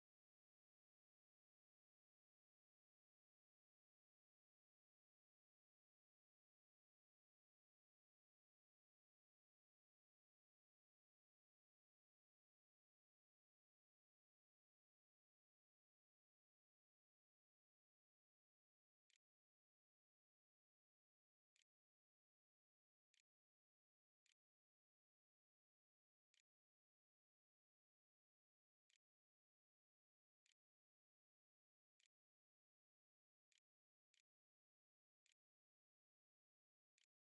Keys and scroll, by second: 17.8-20.0 typing, 21.1-26.6 typing, 27.8 `, 27.9 Escape, 28.5 Tab, 28.9-37.0 typing.